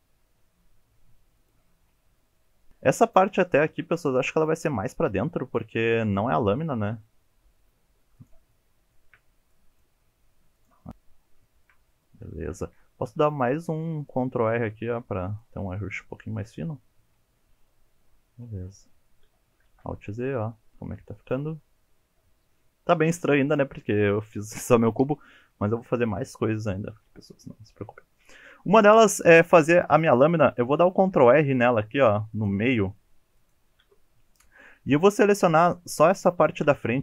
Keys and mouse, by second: 0.0 shift+middle click, 0.3 click, 0.4 g, 1.1 click, 1.3 shift+middle click, 1.6 click, 1.7 g, 2.5 shift+middle click, 3.1 click, 3.3 g, 4.5 click, 4.8 shift+middle click, 6.1 click, 6.4 g, 8.0 click, 8.2 shift+middle click, 8.4 shift+middle click, 8.7 click, 8.9 g, 9.3 click, 9.4 shift+middle click, 9.8 shift+middle click, 10.0 click, 10.3 g, 10.6 click, 10.8 shift+middle click, 11.5 shift+middle click, 12.4 shift+middle click, 13.0 ctrl+r, 13.7 click, 14.1 click, 14.5 g, 15.3 click, 16.1 shift+middle click, 19.0 shift+middle click, 19.7 alt+z, 20.1-28.2 middle drag, 30.9 ctrl+r, 33.4 click, 35.2 shift+middle click, 36.6 2.